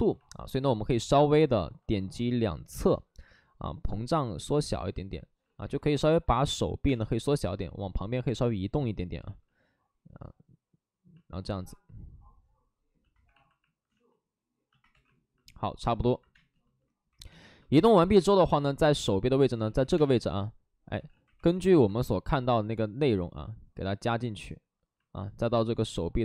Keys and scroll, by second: 0.4 w, 5.3 ctrl+z, 5.9-6.8 typing, 8.1 w, 11.5 w, 13.0-13.7 typing, 13.8 ctrl+z, 14.8 2, 16.3 space, 17.2 2, 17.8 space, 19.6 ctrl+z, 19.6 space, 20.8 ctrl+z, 20.8 space, 20.8 2, 21.3 2.